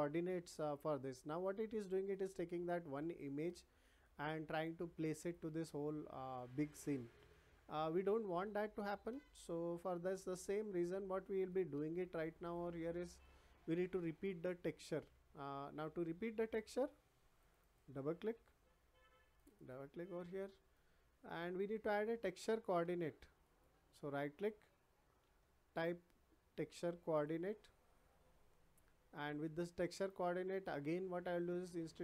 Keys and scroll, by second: 25.2 t.